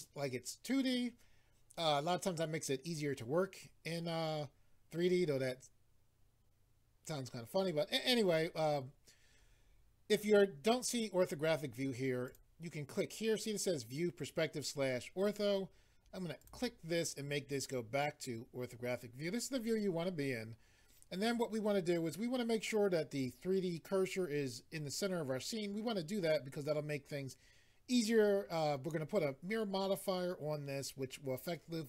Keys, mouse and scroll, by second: 12.3 click, 16.4 click.